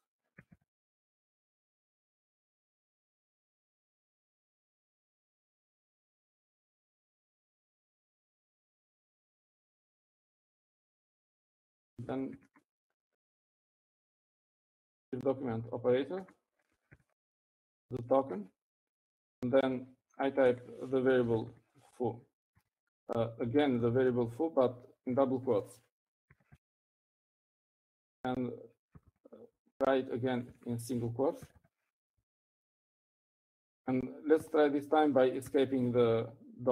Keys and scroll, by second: 1.3 ctrl+c, 1.6-3.2 typing, 9.8-10.5 typing, 12.7-14.2 typing, 15.6-16.3 typing, 17.8-19.3 typing, 22.1-29.2 typing, 30.4-33.8 typing, 36.1-36.7 typing.